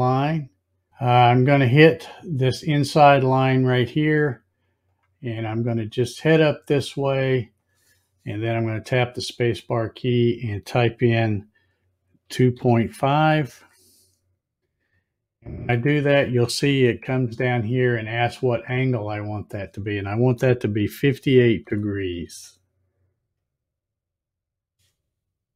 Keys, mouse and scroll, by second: 4.9 click, 9.3 space.